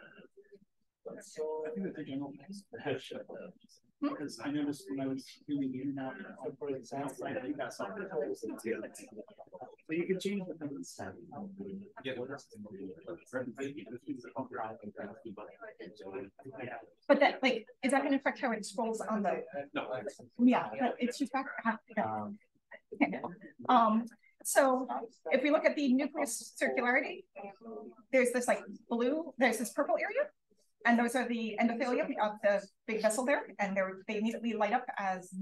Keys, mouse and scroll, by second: 1.1-2.5 drag, 4.2-5.9 drag, 9.5-10.3 scroll up 1, 10.3-13.1 scroll up 1, 11.2-12.5 drag, 14.9 click.